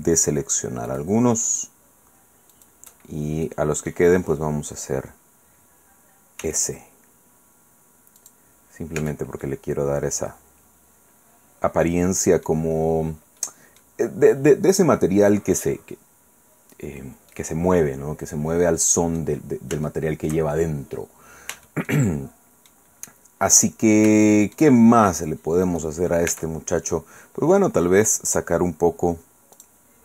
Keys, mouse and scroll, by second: 0.9 alt+shift+right click, 2.5 alt+shift+right click, 3.0-3.4 scroll down 2, 3.4 right click, 6.4 s, 8.2 click, 8.5-8.8 scroll down 1, 9.0 Tab, 9.4-12.6 drag, 12.6-13.4 scroll down 1, 13.4 click, 16.4-17.2 scroll down 2, 17.3-19.4 middle drag, 19.8 shift+middle click, 21.6 shift+middle click, 22.0 shift+click, 22.9-23.4 scroll up 1, 23.4 scroll down 1, 24.2 shift+click, 24.8 shift+scroll up 1, 25.1-25.6 scroll down 1, 25.6 right click, 26.3 Tab, 26.7-27.5 scroll up 1, 29.5 click.